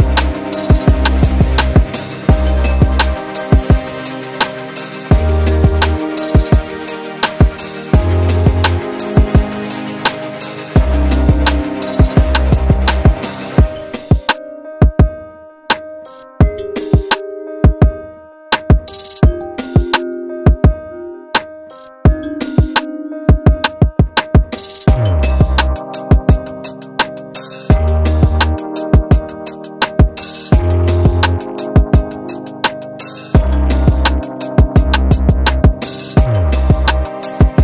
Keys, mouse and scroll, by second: 0.8-1.6 scroll down 4, 2.2 click, 3.0 click, 4.6 scroll up 2, 4.9-6.1 alt+drag, 6.2 alt+middle click, 6.5 scroll up 2, 6.8 alt+click, 7.8 scroll down 2, 8.1 alt+click, 8.5 shift+right click, 9.6 alt+middle click, 9.6 alt+scroll up 1, 9.9 alt+click, 10.7 alt+click, 11.1 click, 11.4 alt+click, 11.7 shift+right click, 12.5 scroll up 2, 12.6 scroll down 1, 12.7 scroll up 2, 12.9 alt+click, 13.4 click, 13.7 scroll up 1, 13.9 alt+middle click, 14.2 shift+right click, 15.1 scroll down 3, 15.3 alt+click, 15.8 scroll down 2, 16.0 alt+click, 17.1 alt+middle click, 17.4 scroll down 2, 17.7 alt+click, 18.6 scroll up 2, 18.8 scroll down 1, 19.1 alt+middle click, 19.4 alt+click, 20.8 scroll up 1, 21.4 scroll up 1, 22.1 scroll up 1, 22.8 click, 24.1 alt+middle click, 25.0 click, 25.6-26.8 typing, 27.5-29.1 drag, 31.0 alt+click, 31.3 alt+middle click, 31.7 alt+click, 33.0 ctrl+g, 34.2 click, 34.3 double click, 35.9-37.4 typing.